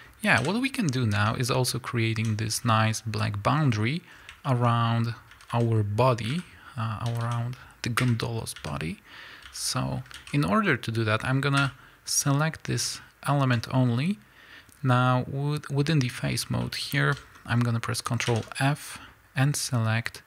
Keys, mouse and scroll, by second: 0.4 KP_1, 0.9 scroll up 1, 1.2 Tab, 2.3 z, 2.5 scroll up 1, 4.1 scroll down 1, 4.5-20.2 shift+middle drag, 4.7 scroll up 1, 5.3-8.5 typing, 10.2 alt+a, 11.6 l, 13.8-15.0 scroll up 1.